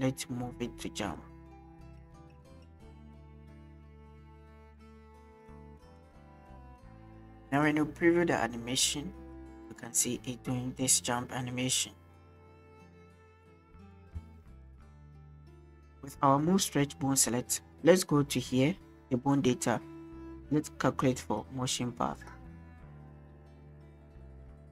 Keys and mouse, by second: 1.2 click, 3.7 click, 6.2 click, 14.2 space, 15.5-15.9 drag, 21.2-22.3 drag.